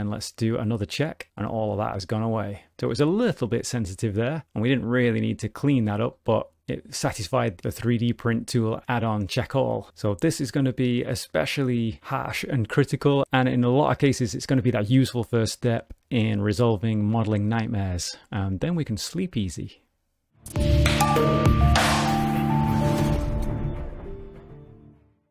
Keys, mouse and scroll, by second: 1.1 click, 1.7 middle click, 2.9 middle click, 5.2 middle click, 6.1 middle click, 11.1 middle click, 11.8 ctrl+middle click, 12.5 shift+middle click.